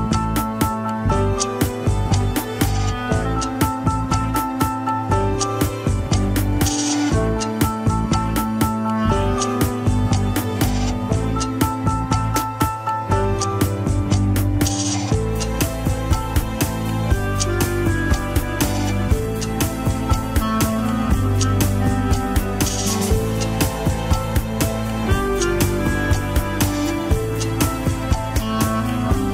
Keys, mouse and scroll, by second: 0.6 ctrl+z, 1.8 ctrl+z, 2.8 shift+click, 4.2 ctrl+z, 5.1 ctrl+z, 6.1 shift+click, 6.4 shift+click, 7.0 scroll down 2, 7.3 KP_3, 7.8 alt+z, 8.7 g, 13.2 KP_1, 13.6 alt+z, 14.2 Tab, 14.8 click, 15.3 ctrl+Tab, 16.0 alt+z, 17.4 click, 17.8 scroll up 2, 18.3 g, 22.6 ctrl+Tab, 22.8 click, 23.3 Tab, 23.7-27.4 middle drag, 27.4 ctrl+z.